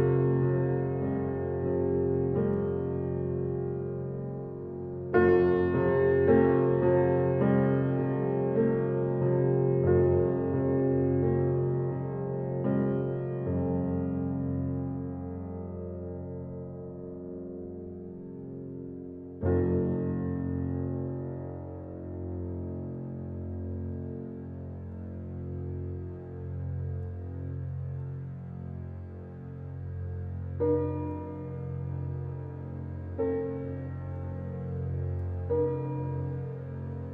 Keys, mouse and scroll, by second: 0.4 scroll down 1, 2.2 click, 2.2 click, 2.8-3.2 scroll down 1, 3.6 alt+scroll up 1, 3.6 alt+middle click, 3.9-4.3 scroll down 2, 4.3 scroll up 1, 6.0 click, 8.7 click, 8.7 click, 13.3 click, 15.0 scroll up 1, 15.3 alt+middle click, 15.7 scroll up 1, 16.4 alt+middle click, 16.5-17.1 scroll up 1, 18.1-19.0 typing, 19.8-22.0 drag, 23.0 alt+right click, 23.3 alt+click, 23.9 right click, 24.9 click, 25.3-25.9 scroll down 1, 25.9 click, 26.4 scroll down 1, 26.7 alt+click, 27.8 alt+right click, 28.2 alt+middle click, 28.6 alt+right click, 29.0 alt+middle click, 29.4 alt+right click, 30.1 click, 35.1 ctrl+g.